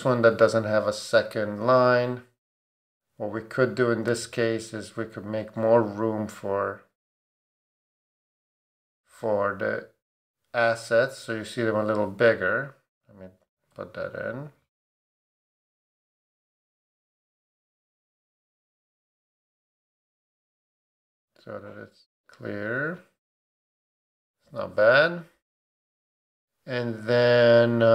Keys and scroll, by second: 13.7 super+d, 23.3 Down.